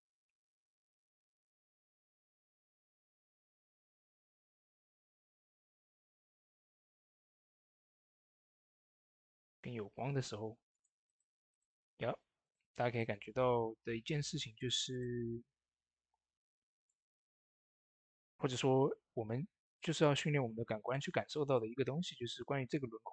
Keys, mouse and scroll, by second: 3.2 click, 3.2 click, 6.3 click, 6.3 click, 9.3 ctrl+v, 10.5 click, 15.9 b, 16.5 ctrl+alt+right click, 16.9 ctrl+d, 17.3 ctrl+alt+right click, 18.3 x, 19.6 click, 20.7-23.1 shift+drag.